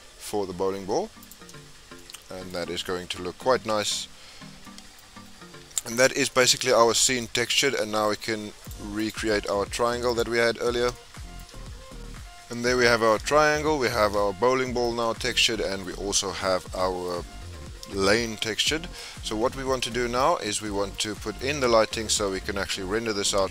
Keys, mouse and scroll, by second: 1.7 scroll up 3, 2.0-2.7 middle drag, 2.7 scroll up 2, 3.0 scroll down 2, 3.1-4.0 middle drag, 4.0-4.6 scroll down 9, 4.6-5.2 middle drag, 5.2-5.8 scroll down 2, 5.8-6.2 shift+middle drag, 6.2 scroll down 1, 6.3-7.4 middle drag, 7.4-7.8 scroll up 2, 7.8-8.7 shift+middle drag, 8.7 click, 9.1 click, 10.2 click, 10.7 scroll up 4, 10.9 shift+middle click, 11.4-11.7 scroll up 2, 12.3-12.7 scroll down 5, 12.7-13.7 middle drag, 13.7-14.2 scroll down 5, 14.2-16.3 shift+middle drag, 16.3-16.8 scroll up 2, 16.8-17.3 middle drag, 17.3-17.9 scroll down 4, 17.9-18.3 shift+middle drag, 18.3-18.7 scroll up 3, 18.7-19.2 shift+middle drag, 19.2 scroll down 1, 19.4-20.4 middle drag, 20.4 scroll down 1, 20.6-23.5 middle drag.